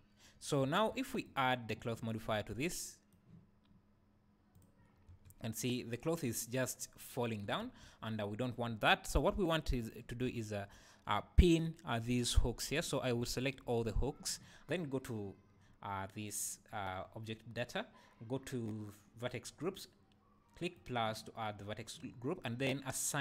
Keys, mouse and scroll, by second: 0.6 Escape, 1.2 click, 2.7-4.5 right drag, 4.5-9.9 drag, 5.1 space, 7.6 Escape, 9.3 Tab, 12.0 click, 13.4 alt+click, 16.3 click, 19.5 scroll up 1, 20.8 click.